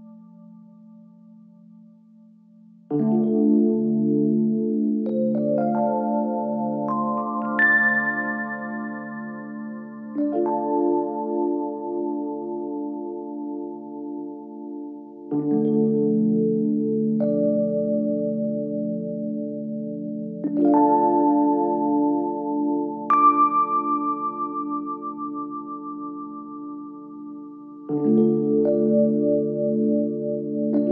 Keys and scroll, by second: 17.1 Escape, 18.7 Escape, 19.5 ctrl+z, 21.1 Escape, 24.4 Escape, 26.1 Escape.